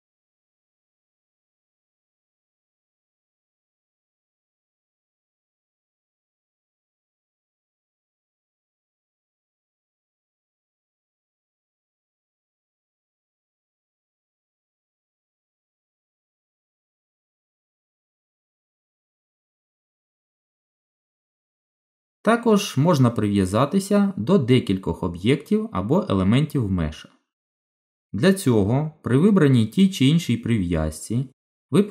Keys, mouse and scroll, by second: 2.7 shift+d, 4.7 middle click, 9.2 shift+d, 11.4-11.8 scroll down 2, 11.6 middle click, 13.5 shift+middle click, 13.9 middle click, 15.6 g, 17.4 click, 18.5 g, 20.1 middle click, 21.4 shift+middle click, 25.1 click.